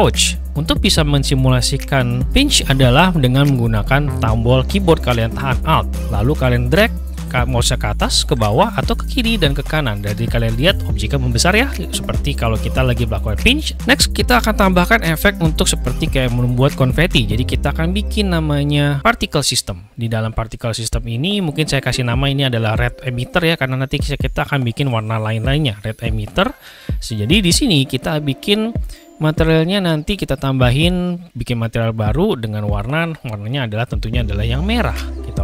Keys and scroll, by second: 26.2 shift+-, 26.5 Return.